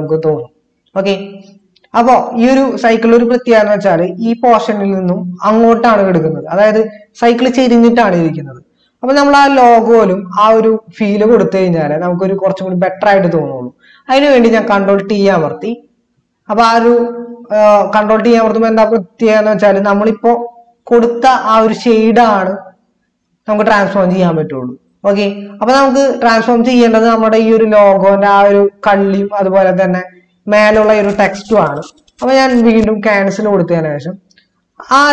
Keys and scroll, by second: 9.4 ctrl++, 15.1 ctrl+t.